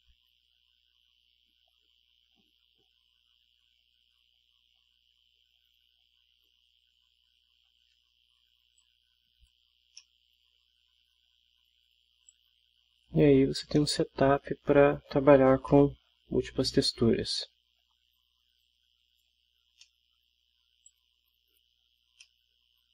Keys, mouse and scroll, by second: 6.1-7.4 scroll down 2, 8.8 click, 9.6 middle click, 9.8 scroll down 2, 10.0-11.2 middle drag, 12.3 click, 13.2 middle click, 13.4 scroll down 2, 13.6 ctrl+scroll up 2, 13.8-14.8 ctrl+middle drag, 15.7-16.2 middle drag, 17.4-18.0 middle drag, 18.6-19.4 drag, 19.8-20.3 middle drag, 20.8-21.8 drag, 22.2-22.9 middle drag.